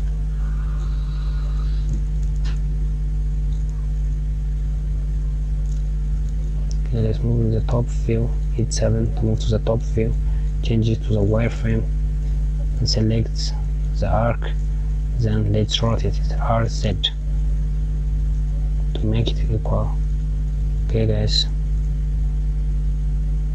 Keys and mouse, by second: 0.6 click, 0.9 KP_Add, 2.3 click, 5.3 KP_7, 6.8-10.5 drag, 12.1 click, 12.9 click, 15.5 r.